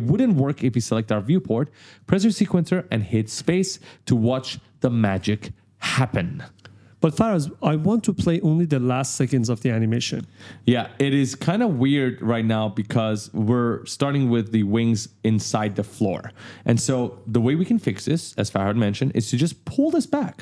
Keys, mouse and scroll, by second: 0.4 click, 1.6 click, 3.1 space, 11.3 space, 13.5 click.